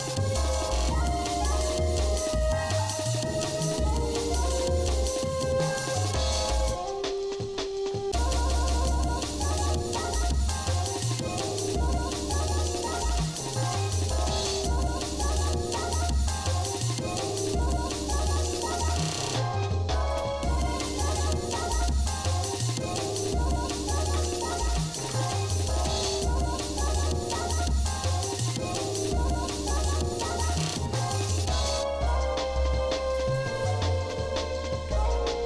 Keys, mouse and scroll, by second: 0.1 scroll up 1, 1.1 click, 2.4 shift+click, 3.8 click, 4.9 shift+click, 6.0 shift+middle click, 6.8 scroll down 3, 7.1 scroll up 2, 7.3-7.9 scroll down 4, 7.9 scroll up 2, 8.7 scroll up 2, 9.1 scroll down 1, 10.0 middle click, 10.7 middle click, 12.9 j, 14.3 click, 15.4 shift+click, 16.6 click, 17.6 shift+click, 19.1 j, 20.1 click, 21.9 click, 23.0 shift+click, 24.1 j, 25.0 ctrl+Tab, 25.8 click, 26.6 shift+click, 27.2 shift+middle click, 28.0 shift+middle click, 30.5 i, 33.7 shift+middle click, 35.0 e.